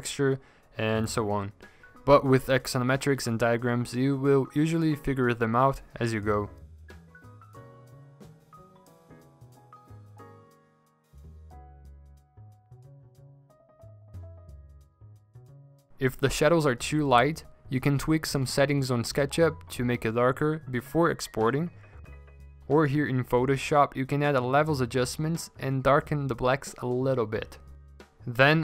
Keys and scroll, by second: 14.9 ctrl+g, 15.5 typing, 15.8 Return, 18.0-19.5 typing, 20.8 v, 21.1 ctrl+alt+z, 21.8 ctrl+alt+g, 27.1 ctrl+z.